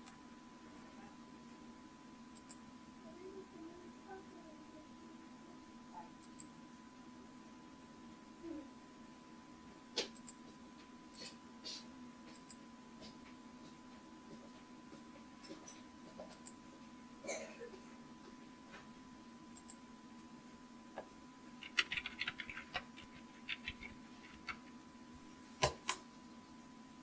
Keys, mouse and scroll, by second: 0.0-2.5 right drag, 2.5 click, 6.3-8.5 drag, 10.5-14.9 drag, 16.4-18.3 drag, 19.7 click, 21.8-24.2 typing, 24.4 Return.